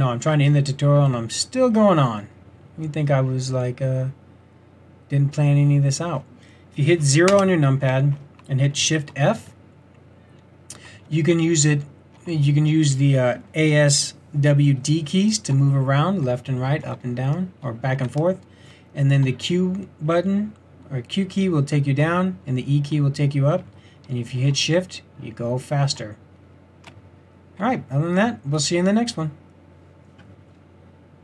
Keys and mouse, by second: 7.3 KP_0, 9.2 shift+f, 26.0 typing.